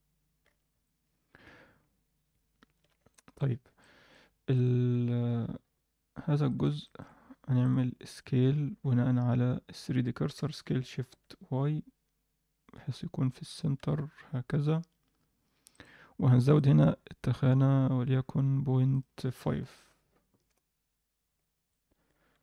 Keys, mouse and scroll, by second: 0.3-2.7 scroll down 3, 0.4 alt+a, 0.8-2.7 middle drag, 3.1 middle drag, 3.8 alt+middle drag, 4.5 click, 5.6 KP_1, 6.1-6.4 scroll up 2, 6.4 alt+shift+middle click, 6.8 ctrl+middle click, 7.6-8.1 drag, 8.8 s, 10.3 s, 16.5 click, 16.9-17.5 scroll down 1, 17.5-18.9 scroll down 1, 18.9-20.5 drag, 18.9-19.6 scroll down 5, 21.2 alt+a, 21.4 scroll down 1, 21.6-22.0 alt+middle drag.